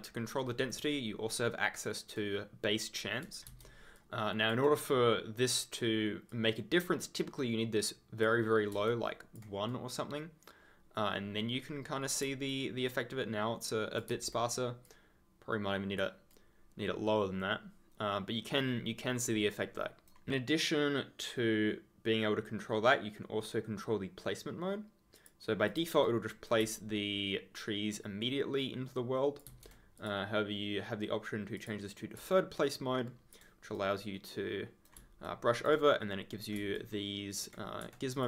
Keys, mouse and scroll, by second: 1.3 ctrl+click, 3.4 ctrl+z, 3.9 ctrl+click, 4.3 ctrl+scroll up 1, 6.3 click, 8.8 ctrl+click, 9.1-9.7 ctrl+scroll down 1, 9.7 right click, 12.5 ctrl+click, 14.1 ctrl+z, 14.8 click, 16.3 right click, 25.1 click, 26.0 right click, 26.7 ctrl+click, 29.4 ctrl+z, 29.9 click, 31.5 click, 32.2 ctrl+click, 32.4 ctrl+scroll up 1, 33.0 ctrl+scroll down 1, 33.7 right click, 35.2 ctrl+click, 36.7 ctrl+click, 36.8-37.5 ctrl+scroll up 1, 38.1 click.